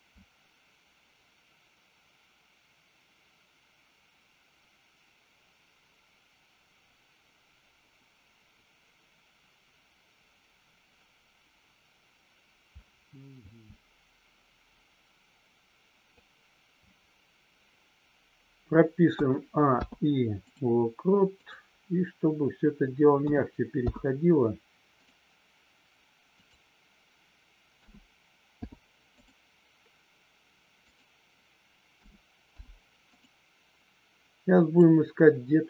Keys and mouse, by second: 19.7 i, 21.3 click, 23.7 i, 26.3 click, 28.6 i, 30.7 click, 32.5 i, 34.6 click.